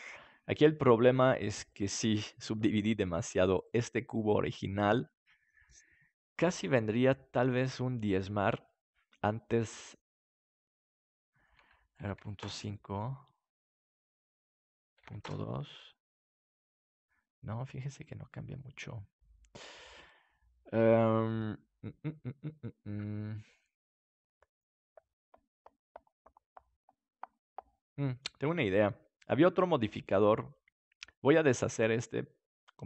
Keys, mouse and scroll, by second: 3.6-5.3 right drag, 6.5-8.6 drag, 10.0-13.7 drag, 14.6-16.3 drag, 31.6-32.8 drag.